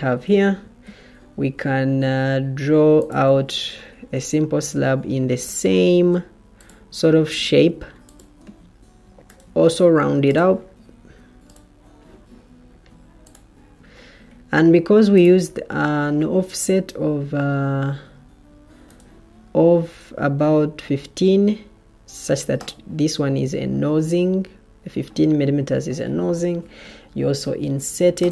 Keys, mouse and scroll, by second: 4.8 Escape, 6.0 Escape, 10.3 Escape, 26.5 Escape.